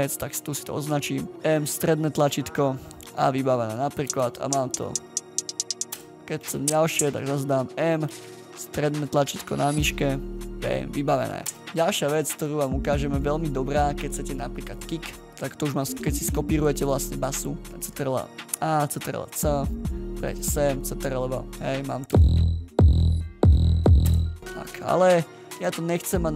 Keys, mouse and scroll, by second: 1.3 middle click, 11.6 right click, 14.0-14.7 ctrl+scroll up 3, 14.7 ctrl+scroll up 1, 14.7 double click, 15.1-15.5 ctrl+scroll down 1, 15.5 ctrl+scroll, 15.5-15.9 scroll up 1, 16.8 click, 17.1-17.6 ctrl+scroll down 1, 17.8 ctrl+a, 20.3 click, 20.6-21.3 ctrl+scroll down 1, 24.0 space.